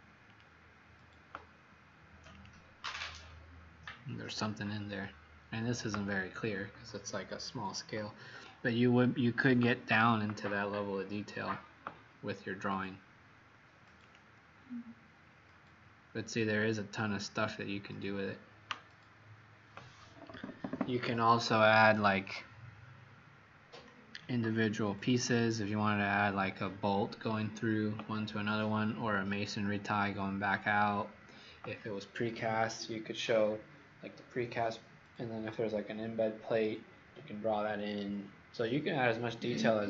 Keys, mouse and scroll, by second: 5.7-6.8 scroll down 5, 7.9 scroll up 3, 10.0-10.5 scroll down 7, 10.8-11.1 scroll down 6, 11.7 scroll up 1, 14.0 click, 15.2-15.5 scroll up 5.